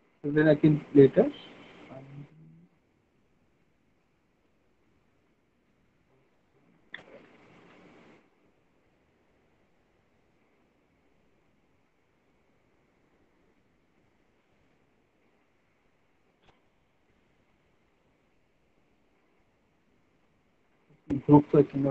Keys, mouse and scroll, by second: 1.5 right click, 3.0 right click, 4.2 right click, 6.3 alt+middle click, 7.1 ctrl+z, 9.3 alt+middle click, 10.8 middle click, 12.8 alt+middle click, 13.2 middle click, 14.0 click, 15.5 click, 16.5 click, 21.7 alt+middle click.